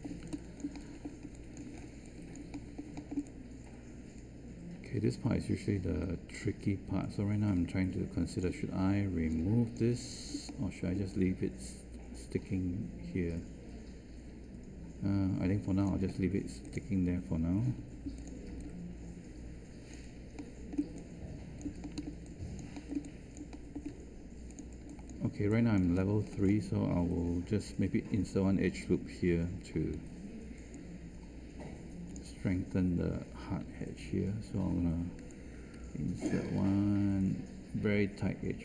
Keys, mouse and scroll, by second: 17.7 3, 29.9 Tab, 33.6 1.